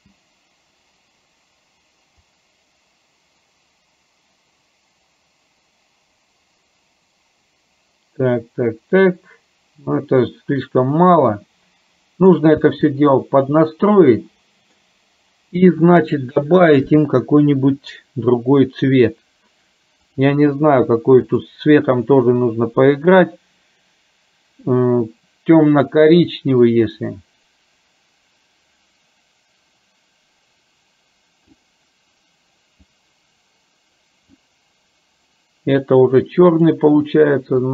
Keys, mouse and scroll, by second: 0.1 space, 2.5-12.6 drag, 12.8 space, 13.6-14.8 middle drag, 17.0 click, 21.3 click, 36.6 click.